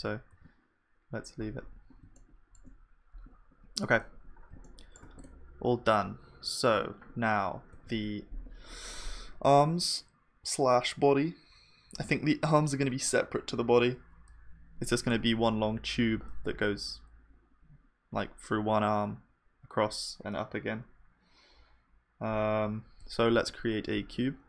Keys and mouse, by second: 0.3 ctrl+s, 0.3 middle click, 2.3-3.6 middle drag, 4.1 KP_1, 5.5-7.2 drag, 7.8 shift+a, 23.3 shift+a.